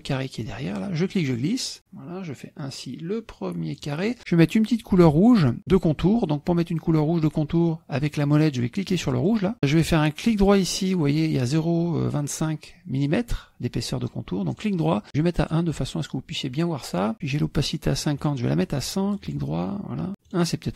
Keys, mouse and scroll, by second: 1.0-4.0 drag, 9.3 click, 14.5 right click, 15.5 click, 18.2 right click, 19.3 click, 20.3 right click.